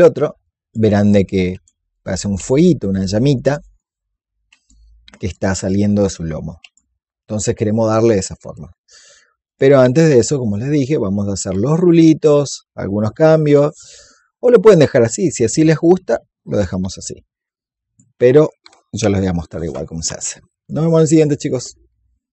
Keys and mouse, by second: 0.3-13.4 alt+drag, 14.6-19.4 drag.